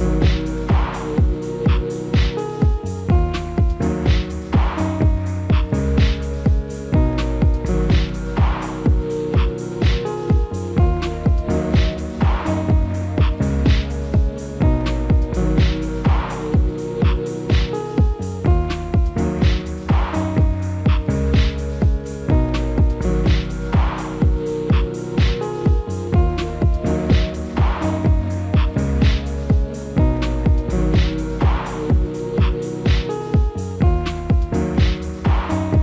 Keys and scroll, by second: 21.4 F4.